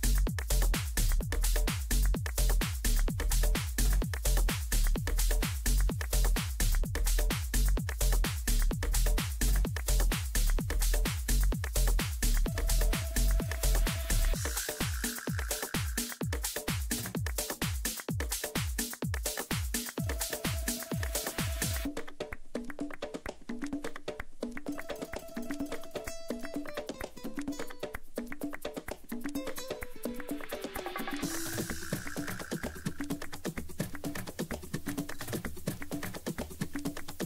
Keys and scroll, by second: 6.3 Right, 7.7 Left, 14.9 ctrl+g, 15.9 c, 18.8 c, 32.7 ctrl+shift+g, 36.4 ctrl+End.